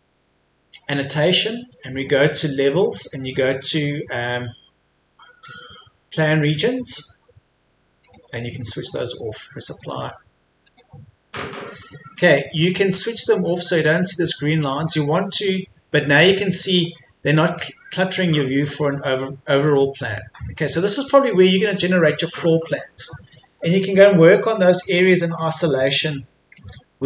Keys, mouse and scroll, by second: 4.1-8.0 scroll down 1, 8.0 click, 14.1 middle click, 14.8-15.4 scroll up 1, 15.4-16.3 scroll down 1, 16.3-17.0 scroll up 1, 17.6-18.4 scroll down 1, 18.4 middle click, 19.4 scroll up 1, 21.5-23.6 scroll down 1, 23.6 click, 24.9-25.4 scroll up 1, 26.1 middle click.